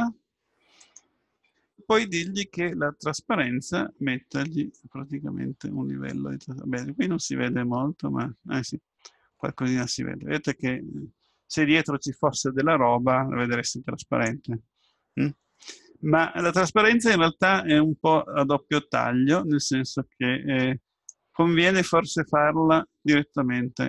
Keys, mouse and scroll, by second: 0.9-2.6 drag, 5.2-6.7 drag, 11.3-12.7 middle drag, 19.9-22.0 drag.